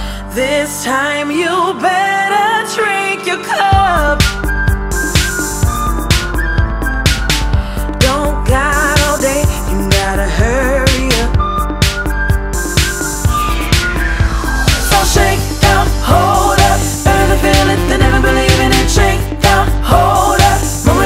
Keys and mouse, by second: 0.0-0.5 typing, 0.0 click, 1.1 click, 2.7 click, 5.7 click, 5.8 click, 9.7 click, 11.5 click, 14.1 click.